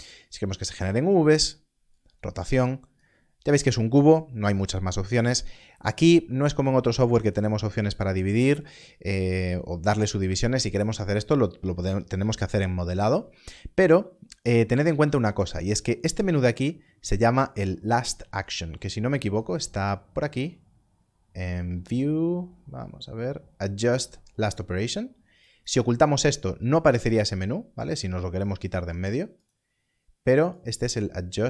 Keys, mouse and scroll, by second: 1.9 click, 19.4 click, 25.4 click, 29.4 click.